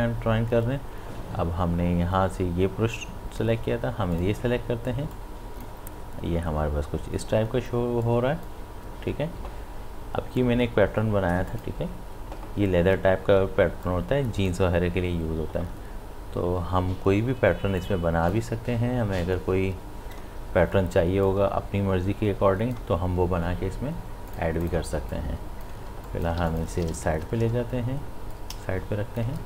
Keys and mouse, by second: 4.2-8.0 drag, 8.0-10.9 drag, 11.5 click, 14.2-16.6 drag, 18.1-19.2 drag, 19.5-21.3 drag, 25.9 space, 26.1 click, 26.4 space, 26.5 ctrl+alt+click, 26.9 ctrl+space, 28.5-29.4 drag.